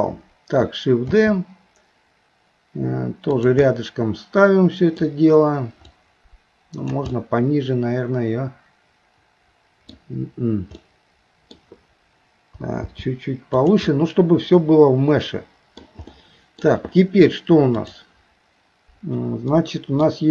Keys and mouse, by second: 1.1 shift+d, 3.7-5.0 middle drag, 6.0 click, 7.1-9.9 middle drag, 10.9 middle click, 12.8 g, 13.9-15.8 middle drag, 16.1 middle click, 17.8 click, 19.5 middle click.